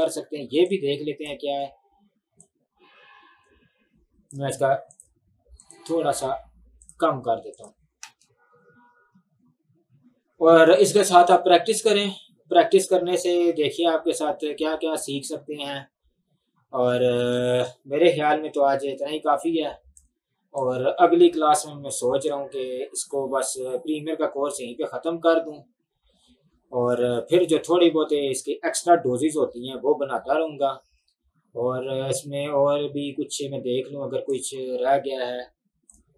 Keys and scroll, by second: 8.1 space, 17.2 space.